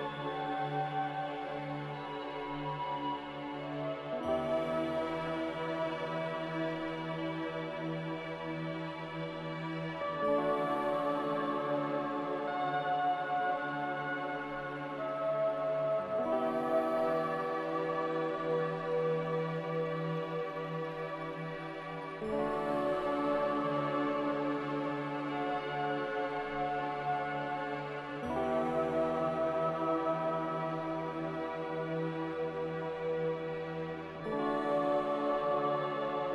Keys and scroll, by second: 2.5-3.7 typing, 25.7-26.7 typing.